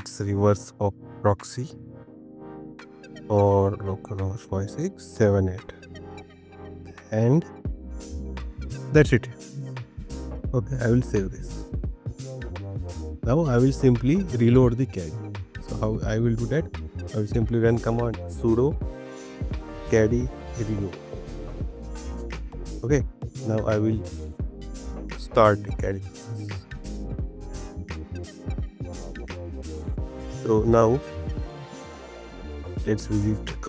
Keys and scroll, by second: 6.5 shift+}, 7.4 Left, 23.2 Up, 23.8 BackSpace, 27.7 BackSpace.